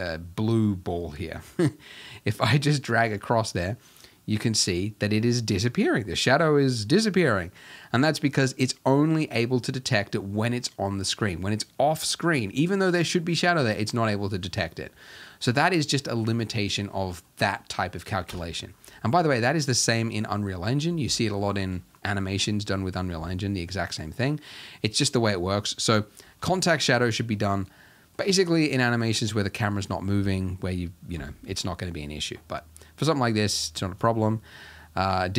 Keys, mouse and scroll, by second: 11.0-18.3 shift+middle drag, 18.3 KP_0, 21.1-22.8 shift+middle drag, 22.8-23.2 scroll down 1, 23.2-26.3 shift+middle drag, 26.5-34.2 ctrl+middle drag, 34.2-35.3 shift+drag.